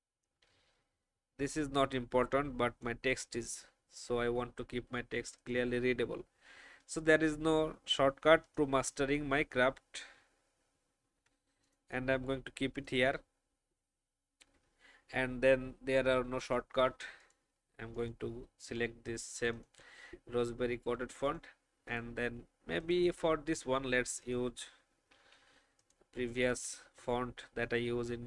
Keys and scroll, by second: 11.0 ctrl+g, 25.1 r.